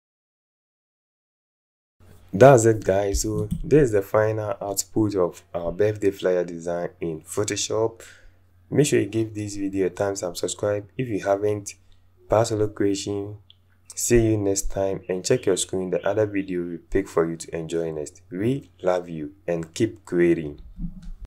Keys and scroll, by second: 1.4 ctrl+0.